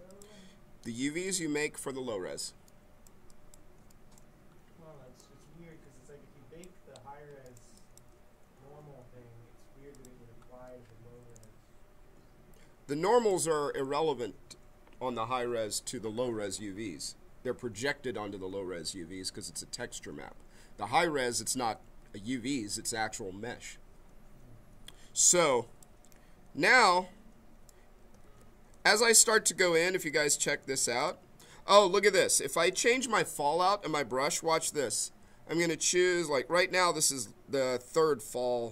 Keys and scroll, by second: 11.2 b, 28.2 ctrl+z, 29.9 m.